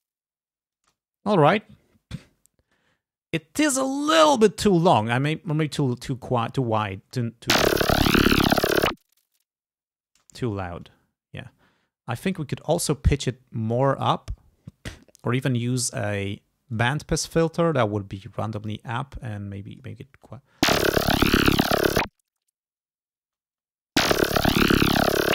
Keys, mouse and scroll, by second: 0.9 space, 1.2 scroll down 1, 2.7 click, 5.3-6.4 drag, 7.1 space, 10.3 space, 10.6 ctrl+scroll down 2, 12.3 click, 15.3 click, 16.8 click, 18.2 click, 19.3 click, 20.2 space, 23.3 space.